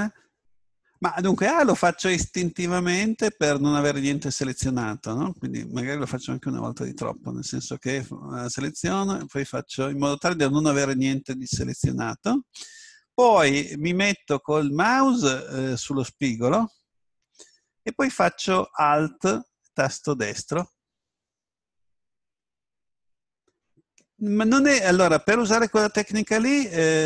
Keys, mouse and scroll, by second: 8.4 right click, 9.9 a, 20.4 right click.